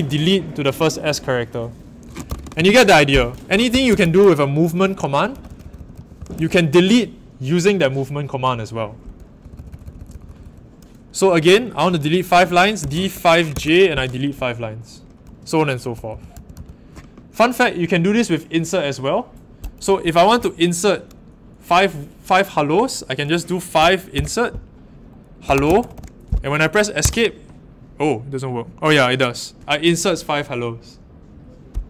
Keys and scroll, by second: 2.2 u, 3.7-4.0 typing, 5.1-6.8 typing, 9.4-10.3 typing, 12.5-14.0 typing, 16.1-16.5 typing, 23.5-26.4 typing, 27.0 Escape.